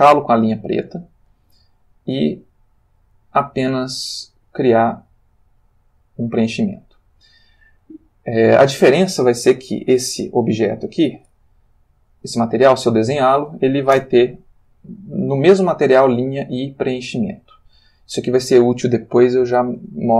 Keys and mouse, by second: 1.8 click, 3.0 click, 4.1 click, 5.6 click, 11.0 click, 12.1 click, 14.0 Return.